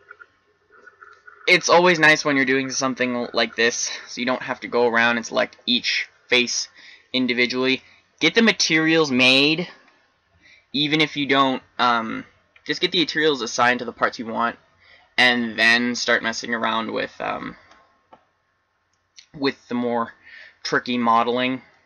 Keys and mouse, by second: 18.8-21.0 middle drag.